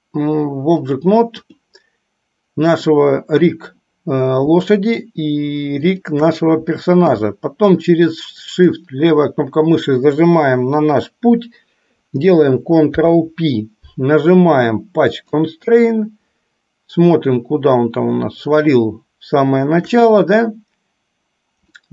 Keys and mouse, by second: 1.2 click, 2.8 click, 6.0-6.4 shift+drag, 8.6 shift+click, 13.0 ctrl+p, 18.9-20.1 shift+middle drag.